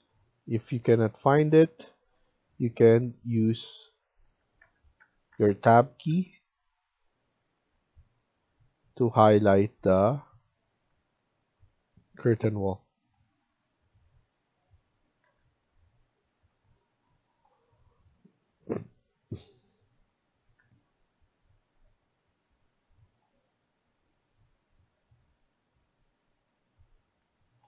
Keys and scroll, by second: 1.4 Escape, 2.8 Tab, 3.4 Tab, 3.8 Tab, 4.2 Tab, 4.5 Tab, 4.9 Tab, 5.2 Tab, 5.5 Tab, 6.0 Tab, 9.5 Escape, 12.2 Tab, 12.6 Tab, 15.1 Escape, 27.1 Escape.